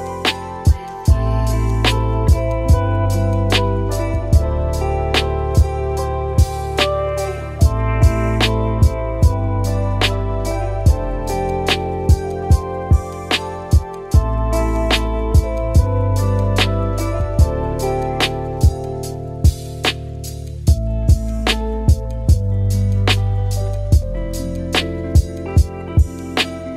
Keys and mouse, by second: 1.0 click, 5.7-6.3 middle drag, 7.1-7.6 middle drag, 9.3 middle click, 11.5 click, 11.7 click, 12.1 click, 12.4 click, 13.8 shift+middle drag, 14.4 Tab, 15.2 shift+d, 16.1 p, 16.7 Tab, 17.1 click, 17.9 g, 21.2 click, 21.7 drag, 22.1 click, 22.3-25.5 shift+drag, 24.3 BackSpace, 26.3 click, 26.4 middle click.